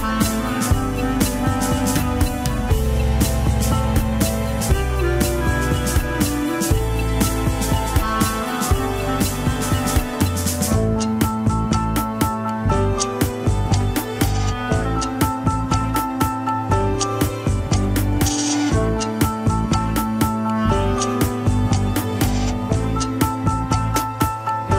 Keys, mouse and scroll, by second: 1.0 ctrl+click, 3.8 ctrl+click, 4.1-6.3 middle drag, 6.3 alt+z, 6.7-7.8 middle drag, 7.8 scroll up 1, 8.1-9.3 shift+middle drag, 9.3 click, 9.7-10.6 scroll down 1, 10.6 middle click, 10.9 scroll up 1, 11.2-14.5 drag, 15.4-17.3 drag, 17.3 ctrl+z, 17.7-19.6 middle drag, 19.6 ctrl+click, 20.4 alt+z, 20.7 scroll up 2, 20.9 shift+middle click, 21.5 scroll up 1, 22.2-24.3 middle drag, 24.3 alt+z, 24.6 middle click.